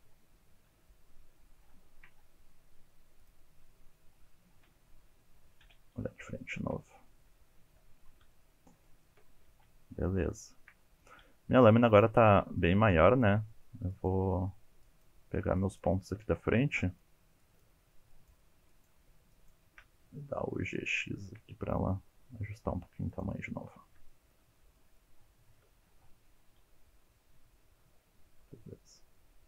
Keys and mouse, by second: 1.8 shift+click, 3.2 click, 3.6 middle click, 4.6 KP_3, 5.6 KP_1, 6.3 shift+click, 7.3 shift+click, 8.3 shift+click, 8.7 shift+click, 9.0 shift+click, 9.5 alt+z, 10.4 shift+click, 11.6 1, 12.1 alt+z, 12.7 click, 13.5 shift+middle click, 14.0 shift+click, 14.3 shift+middle click, 14.9 shift+click, 15.5 shift+click, 16.0 shift+middle click, 16.8 shift+click, 17.5 shift+click, 18.2 shift+click, 18.7 shift+click, 19.3 shift+click, 20.6 g, 20.8 x, 23.1 click, 24.1 shift+middle click, 24.4 shift+middle click, 24.6 shift+middle click, 24.8 alt+z, 25.0-25.7 middle drag, 25.9-26.2 middle drag, 26.5 KP_1, 26.8 shift+middle click, 26.9 shift+middle click, 27.6 g, 27.9 click, 28.1 click, 28.1 g, 28.3 click, 28.4 alt+z, 28.8 g.